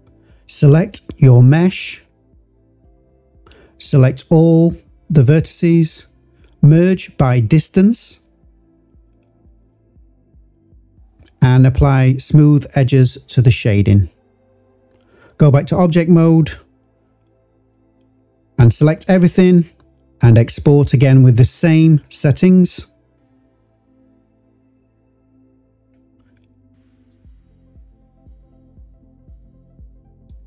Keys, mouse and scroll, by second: 1.9 click, 3.3 Tab, 4.0 a, 5.0-8.2 drag, 9.3-13.1 drag, 15.2 Tab, 16.2 click, 16.7 click, 17.2 shift+click, 17.8-19.5 drag.